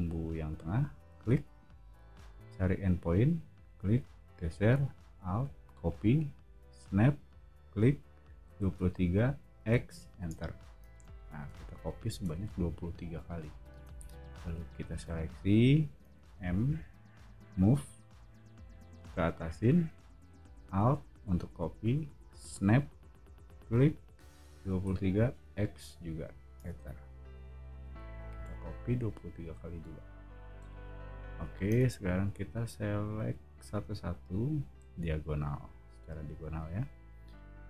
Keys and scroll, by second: 8.2-9.5 typing, 10.3 Return, 10.9 space, 11.5 o, 13.7 space, 16.2 m, 24.6-25.5 typing, 26.6 Return, 27.8 o, 31.8 space.